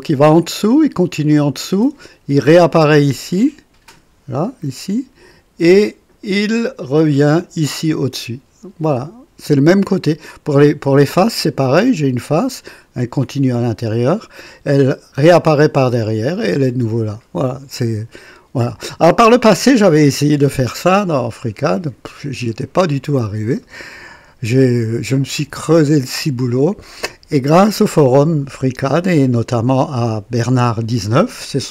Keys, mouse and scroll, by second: 4.7 click, 7.3 click, 11.0 click, 23.6-24.6 right drag.